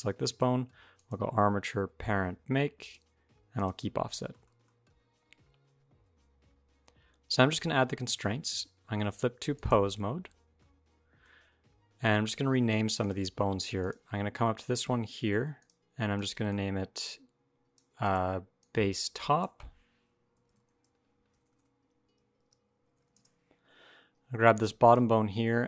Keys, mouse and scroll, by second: 0.8 click, 3.7 scroll down 6, 4.0 shift+middle click, 4.5 middle click, 4.5 scroll up 1, 6.2-6.9 scroll up 1, 8.2 click, 10.4 middle click, 11.6 scroll down 1, 11.8 middle click, 12.8 click, 13.1-13.4 scroll up 1, 13.6 click, 15.4 click, 16.0 click, 21.2 BackSpace, 21.4 BackSpace, 24.3 click.